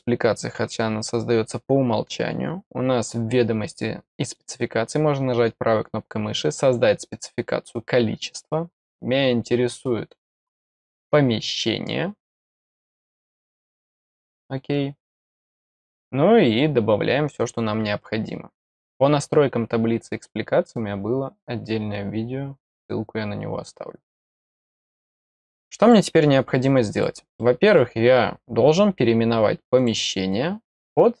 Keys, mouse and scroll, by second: 2.5-3.4 scroll down 4, 4.2 right click, 7.0 click, 8.9-9.3 scroll down 1, 9.5-10.2 scroll down 1, 10.4 scroll down 1, 14.2 click, 16.1-17.5 scroll down 1, 24.7 middle click, 25.8 click, 26.9 click, 27.3 middle click, 29.7 click.